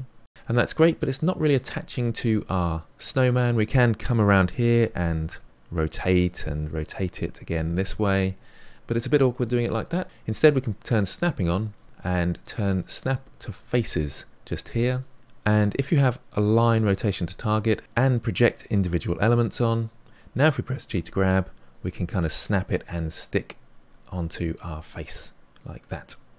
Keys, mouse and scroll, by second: 0.4-2.1 middle drag, 3.0-4.7 middle drag, 4.7 r, 6.2-7.4 middle drag, 7.4 r, 8.2-10.0 middle drag, 11.1 click, 12.3-15.1 drag, 17.8-19.3 drag, 20.9 g, 24.8-26.3 middle drag.